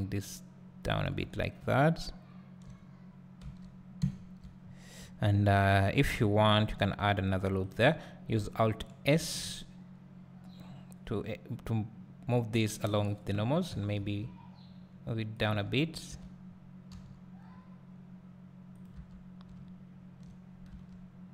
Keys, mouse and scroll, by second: 0.9 click, 1.0 Tab, 1.4 scroll down 2, 1.6 `, 2.9-3.6 scroll up 2, 3.6 Tab, 4.0 `, 4.6-5.0 scroll up 2, 5.0-6.5 scroll down 2, 6.5 ctrl+r, 9.2 alt+s, 13.7 g, 16.3 Tab, 16.9 g, 18.8 click, 19.0 Tab, 19.5 `, 21.2-21.3 scroll down 2.